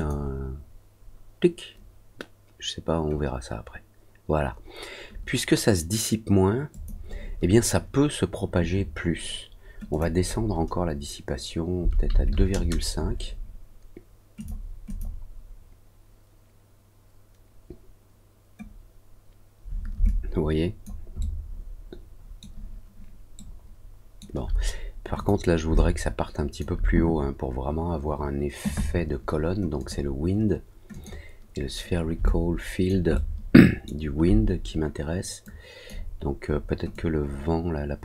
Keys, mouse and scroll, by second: 6.6 click, 9.8 click, 14.3 click, 14.8 click, 20.0 alt+click, 21.1-22.3 alt+middle drag, 23.3 alt+middle click, 25.1 click, 25.7 alt+click, 29.7 click, 30.8 click, 32.2 alt+click, 33.1 alt+middle click, 35.4 click, 36.8-38.0 drag.